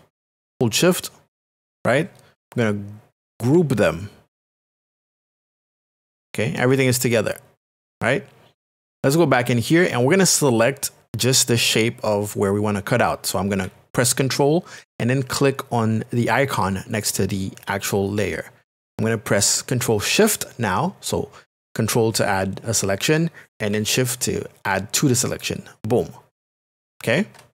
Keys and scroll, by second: 4.9 ctrl+g.